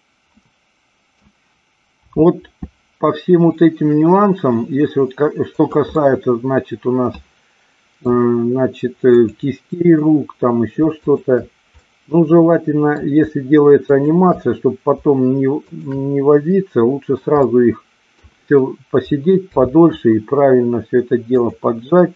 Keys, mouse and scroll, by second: 0.4-1.1 middle drag, 1.9 r, 5.9-8.0 middle drag, 9.1-10.1 drag, 12.1-13.0 middle drag, 13.9-15.0 shift+drag, 15.5-16.8 shift+drag, 16.8 middle click, 17.4-18.3 middle drag, 19.5 r, 21.3 click.